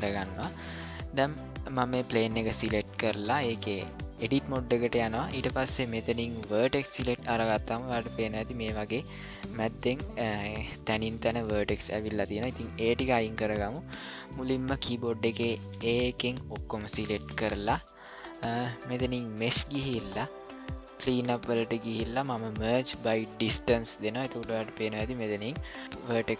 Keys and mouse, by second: 0.4 middle click, 3.5 click, 6.5 click, 15.7 a, 19.4-23.5 drag.